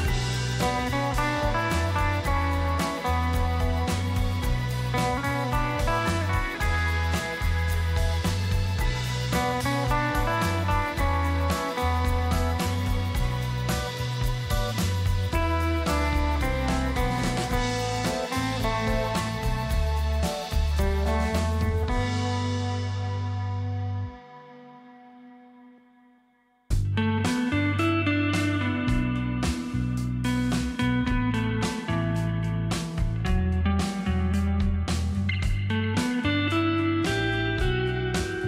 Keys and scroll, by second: 4.7-5.1 typing, 12.3 space, 21.5 Delete, 29.8 ctrl+KP_0, 30.9 space, 32.4 t, 32.9 ctrl+x, 36.1 ctrl+v.